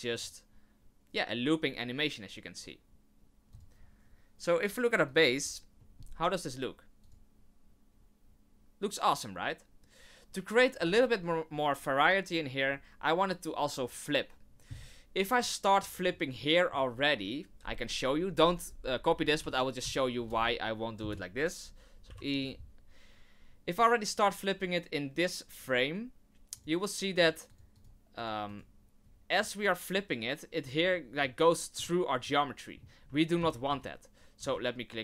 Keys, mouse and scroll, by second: 0.1 click, 3.5 click, 5.1 click, 5.8 middle click, 7.0 click, 10.7 click, 15.4 click, 16.1 middle click, 16.9 scroll up 1, 19.4 r, 22.1 i, 26.5 click, 27.1 click, 27.5 click, 27.7 click, 28.1 click, 28.4 click, 29.4 click, 31.2 middle click, 32.2 middle click, 33.6 ctrl+z, 33.9 ctrl+z, 34.7 ctrl+z.